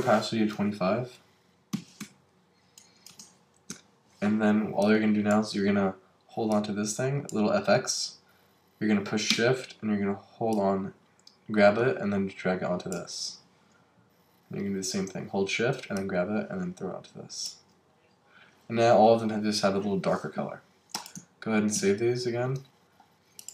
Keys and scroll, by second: 3.1 Return, 21.7 super+s.